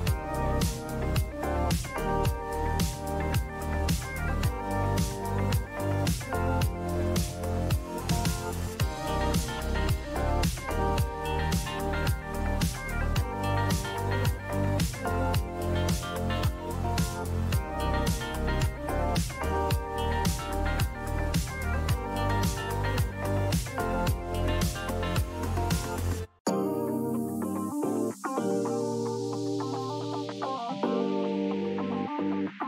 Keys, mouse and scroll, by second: 1.1 alt+Delete, 3.3 ctrl+d, 5.7 right click, 7.2 click, 8.4 click, 8.4 click, 11.0 click, 12.6 click, 15.2 click, 17.2 click, 23.5 click, 23.8-24.7 typing, 27.8 click, 28.0-29.0 typing, 30.8 click, 31.7 click.